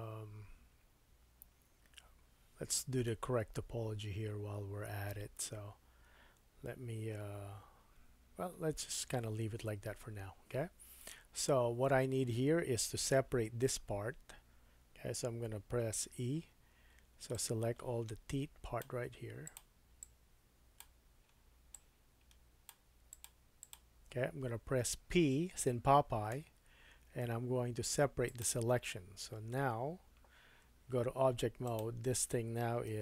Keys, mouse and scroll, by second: 2.1-5.3 scroll up 2, 9.1-12.3 scroll down 2, 12.3-19.6 drag, 16.0 3, 19.6 shift+middle click, 20.0-23.3 shift+drag, 23.6 shift+click, 26.4 p, 31.2 Tab, 31.6 click, 32.9 g.